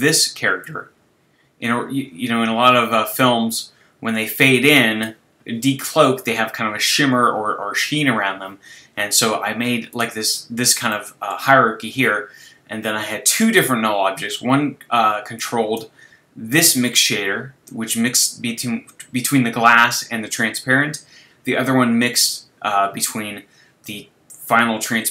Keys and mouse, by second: 10.9-13.9 middle drag, 15.4-19.2 drag.